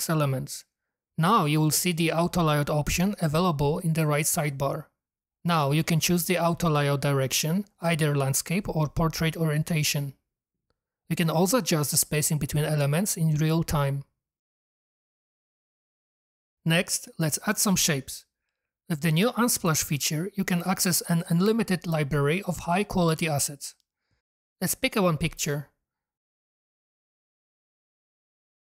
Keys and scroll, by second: 8.0 Up, 8.2 Up, 8.3 Up, 8.4 Up, 8.6 Up, 8.7 Up, 8.9 Up, 8.9 Up, 9.0 Up, 9.1 Up, 9.2 Up, 9.5 Up, 10.1 Down, 10.2 Down, 10.5 Up, 10.7 Up, 10.8 Up, 11.1 Down, 11.2 Up, 11.5 Up, 22.2 m, 22.3 a, 22.4 r, 22.7 Return, 22.7 s.